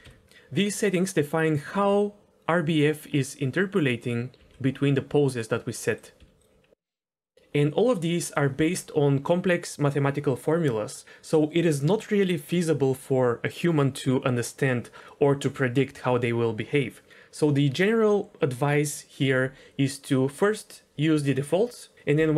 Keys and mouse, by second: 0.0 KP_1, 0.2 g, 1.7 g, 4.3 g, 6.2 s, 7.2-8.3 drag.